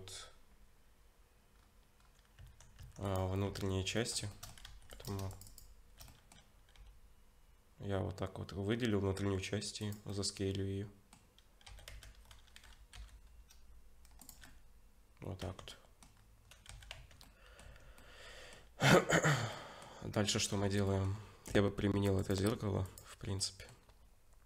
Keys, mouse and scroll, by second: 1.5 scroll up 2, 2.4 Tab, 2.4-2.8 scroll up 4, 2.8 Tab, 3.0 click, 3.5 Tab, 4.0 middle click, 4.3 shift+middle click, 4.7 3, 4.9 click, 5.3 alt+shift+click, 6.1 middle click, 6.7 s, 10.1 middle click, 11.7 s, 14.4 middle click, 15.4 Tab, 15.7 middle click, 16.2-16.6 scroll down 1, 16.8 ctrl+s, 16.8 scroll down 1, 16.9 Tab, 17.2 middle click, 17.7 Tab, 18.0 middle click, 19.3 scroll up 2, 19.5 middle click, 20.2-20.7 scroll down 4, 20.6 ctrl+s, 20.9 middle click, 22.2 click, 23.4 middle click.